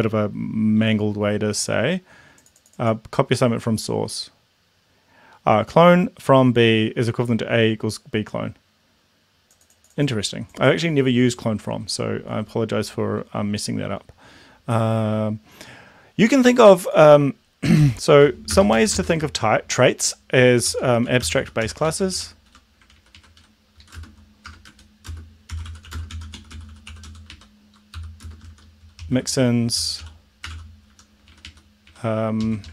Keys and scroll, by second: 18.5 space, 18.8 space, 19.0 space, 19.1 space, 20.5-22.7 typing, 23.0 ctrl+Right, 23.4 End, 23.7 Left, 23.8 Up, 24.0-31.0 typing, 24.7 Down, 31.2 Right.